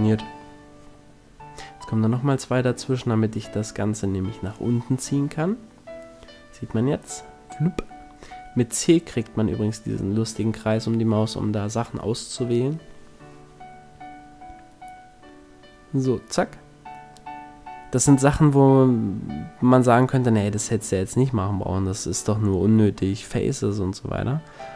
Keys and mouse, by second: 1.7 click, 1.8 s, 2.7 s, 4.2 click, 5.5 a, 6.1 c, 8.5-10.5 middle drag, 12.2 middle click, 13.0-15.3 drag, 14.1 a, 15.3-16.3 middle drag, 17.8 ctrl+r, 19.9 s, 21.8 click, 22.5 a, 22.9 c.